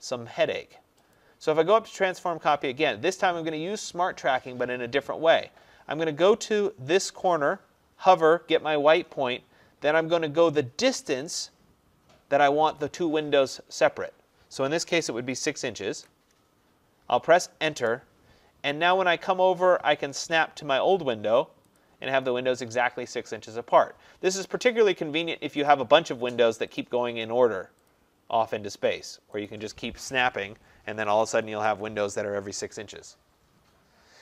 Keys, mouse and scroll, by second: 1.2 click, 15.1 6, 15.9 shift+', 17.8 Return, 21.9 click, 25.7 click, 30.0-30.9 scroll, 30.9 `, 31.1 Escape, 31.4 Escape, 31.6 Escape.